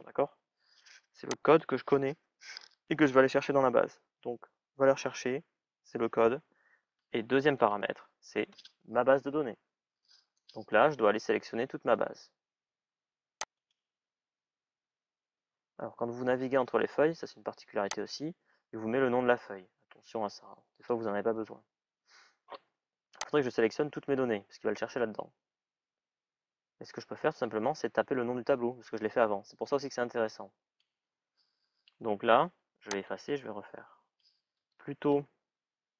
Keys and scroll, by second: 34.4 typing.